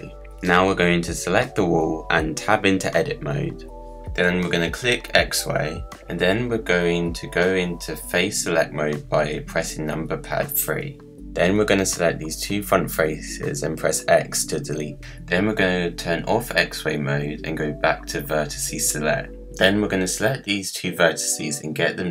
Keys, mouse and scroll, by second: 0.0-1.2 middle drag, 1.2 KP_Decimal, 2.0 scroll down 1, 2.3-2.9 middle drag, 2.9 click, 4.0 Tab, 4.4-5.5 middle drag, 5.5-9.3 drag, 9.3 3, 11.2 click, 13.0 x, 16.7-19.7 drag, 20.1 shift+click, 21.4 KP_Decimal, 21.8 scroll up 1, 21.9 middle click.